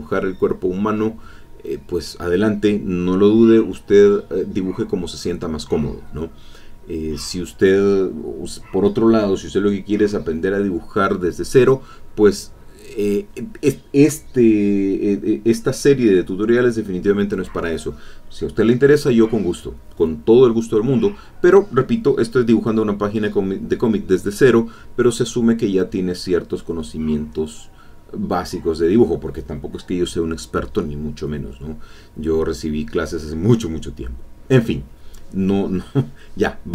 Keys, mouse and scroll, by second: 2.2 middle click, 7.0 click, 7.4-10.8 drag, 12.2-17.6 drag, 17.8 click, 23.8 click, 25.0 click, 33.8-35.2 drag, 35.3-36.5 drag, 36.6-36.7 drag.